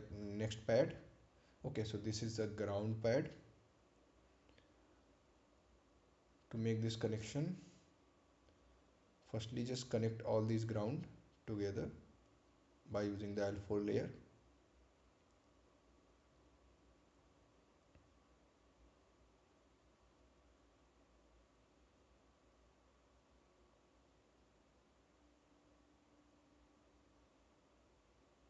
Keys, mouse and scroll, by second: 0.3 right click, 1.1 ctrl+click, 7.7 click, 14.6 scroll down 1, 16.5-16.8 scroll up 1, 17.0-17.6 scroll down 1, 17.6 scroll up 1, 19.7 right click, 20.9 click, 22.4 ctrl+click, 23.7 ctrl+click.